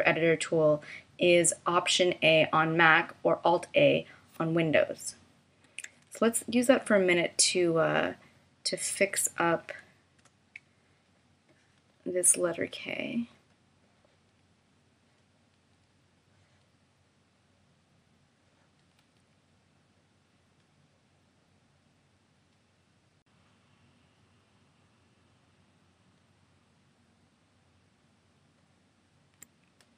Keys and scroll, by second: 5.8 a, 10.1 BackSpace, 10.6 a.